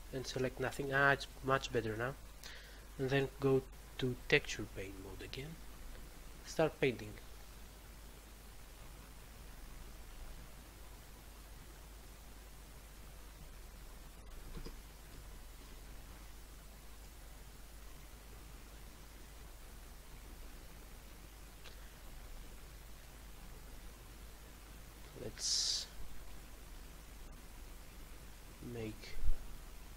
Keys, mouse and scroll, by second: 4.0 click, 5.1 click, 8.5 click, 9.1 click, 10.0 click, 10.3 double click.